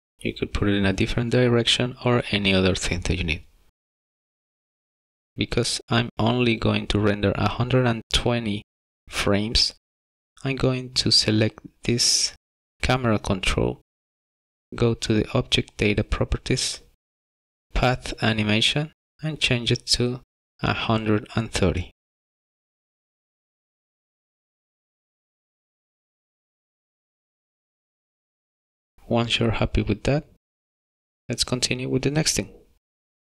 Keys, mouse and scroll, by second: 5.1 click, 6.2 click, 10.5 click, 19.2 click, 21.5 click, 25.5 BackSpace, 30.5 click.